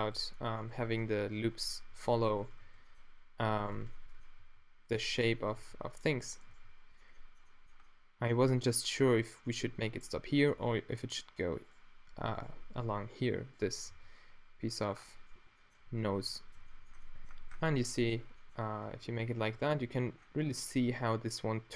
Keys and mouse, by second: 0.1 f, 0.4-0.8 middle drag, 0.8 space, 1.9 z, 2.6 f, 3.4 a, 4.4 g, 5.5 g, 6.5 g, 14.0 f, 16.1 Tab, 18.8 Tab, 19.5 Tab.